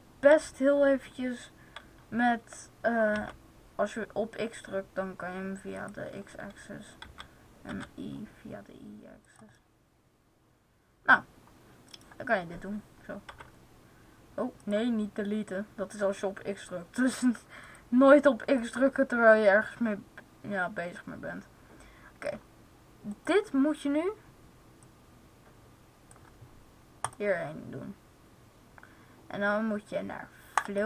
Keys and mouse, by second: 6.0-7.7 drag, 6.9 s, 9.2-10.9 drag, 13.2 x, 14.6-15.7 drag, 15.7 right click, 17.5-19.5 right drag, 18.5-20.4 drag, 23.1-24.7 right drag, 24.7 middle click, 25.0-28.8 drag, 30.4-30.8 drag.